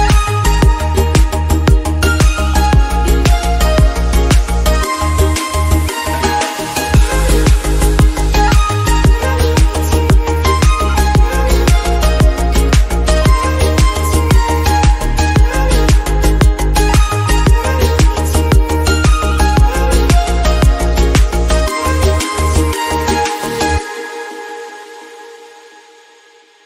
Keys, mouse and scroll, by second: 1.6 shift+d, 3.6 r, 4.4 g, 7.5 scroll down 2, 7.7 middle click, 7.8-8.3 drag, 8.9-10.1 scroll up 3, 11.0-11.8 scroll down 2, 11.8 click, 11.9-12.5 scroll up 3, 12.5 shift+d, 13.7 alt+g, 13.8 alt+r, 14.0 middle click, 14.4 click, 18.8 r, 20.5 middle click, 20.7 scroll up 2, 21.0 click, 22.9 middle click, 23.3 click, 24.5 click, 24.7-25.8 scroll down 9, 25.0 click, 25.8-26.6 drag.